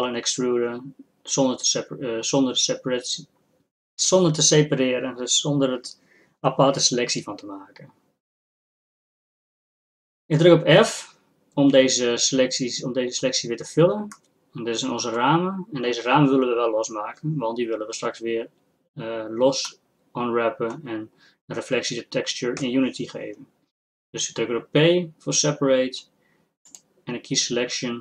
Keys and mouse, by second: 13.3 f, 14.4 click, 22.6 p.